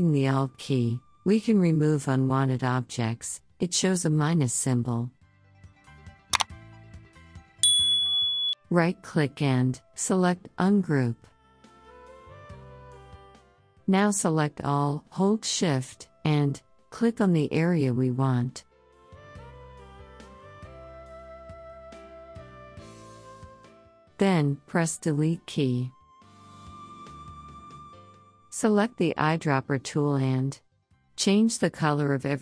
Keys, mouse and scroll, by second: 10.1 right click, 12.0-17.6 drag, 17.8 shift+click, 32.3 click.